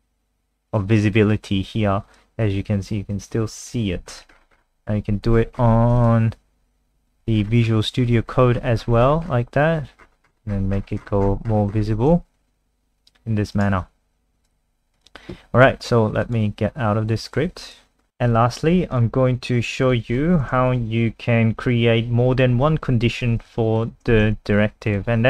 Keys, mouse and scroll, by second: 13.6 right click, 14.4 click, 17.6 click, 18.0 scroll down 1, 18.1 scroll up 1, 18.9 click, 19.0-19.8 scroll up 1, 19.8 click, 20.7 Right, 23.7 shift+click, 24.2 ctrl+c, 24.5 click, 24.9 click.